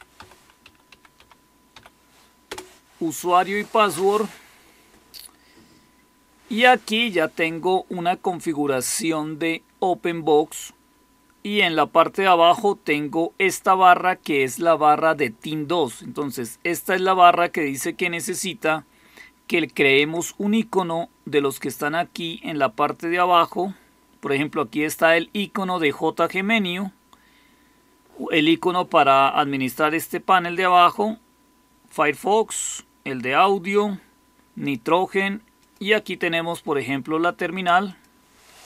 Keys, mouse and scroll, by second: 0.0-1.6 typing, 2.4 Return.